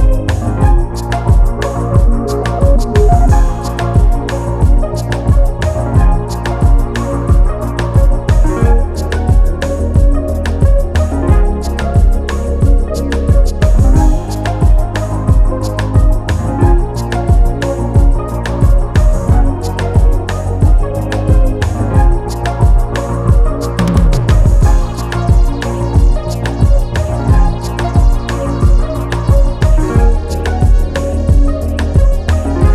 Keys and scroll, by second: 7.5 ctrl+s, 12.3 ctrl+t, 27.7 Return, 31.2 ctrl+s.